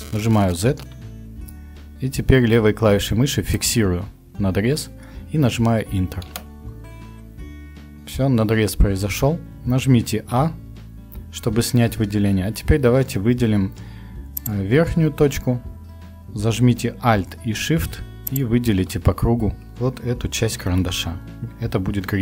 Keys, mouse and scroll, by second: 0.3 z, 4.3 Return, 10.3 a.